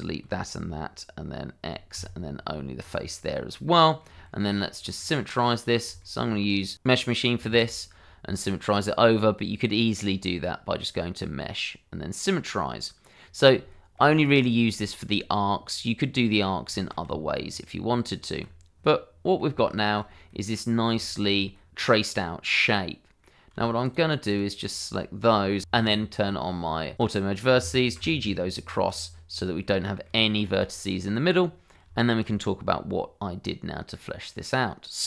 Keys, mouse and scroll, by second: 1.9 x, 2.8 click, 3.3 middle click, 4.2 shift+middle click, 5.0 middle click, 6.0 shift+middle click, 9.3 alt+x, 10.8 click, 13.0 middle click, 13.7 shift+middle click, 14.2 middle click, 14.8 shift+middle click, 15.3 middle click, 16.7 shift+middle click, 17.0 Tab, 18.8 middle click, 19.7 shift+middle click, 20.3 middle click, 21.1 shift+middle click, 21.5 middle click, 22.0 middle click, 23.8 shift+click, 25.6 Escape, 26.9 click, 27.9 g, 28.8 click, 29.6 middle click, 30.2 shift+middle click, 30.7 middle click, 31.9 shift+middle click, 32.3 middle click.